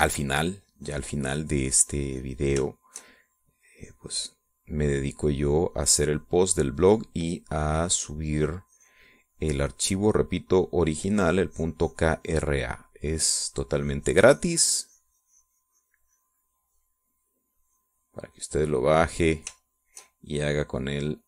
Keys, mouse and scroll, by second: 1.0 middle click, 1.6-3.6 drag, 3.7-9.0 shift+drag, 9.7-13.9 drag, 14.2-20.3 drag, 20.7 shift+click.